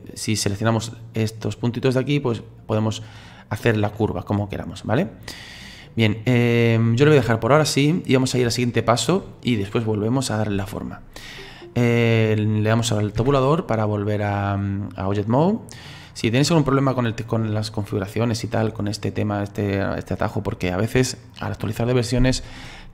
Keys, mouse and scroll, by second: 0.6 right click, 6.7-13.2 middle drag, 13.2 Tab.